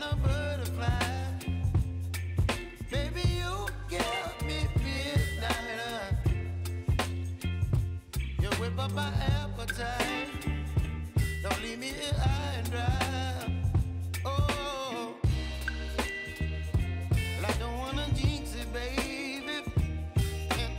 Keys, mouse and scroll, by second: 17.7 v, 18.7-20.7 shift+drag.